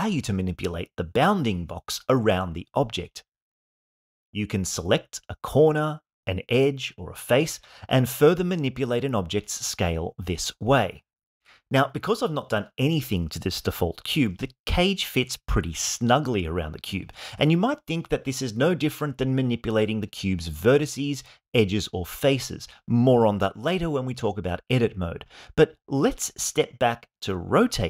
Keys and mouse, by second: 1.0 click, 1.2-3.0 drag, 3.9 click, 4.8 click, 7.5 click, 8.8 click, 10.2 click, 10.4-13.5 drag, 15.3-18.2 drag, 19.6-20.8 drag, 21.5-22.8 drag, 26.9 click.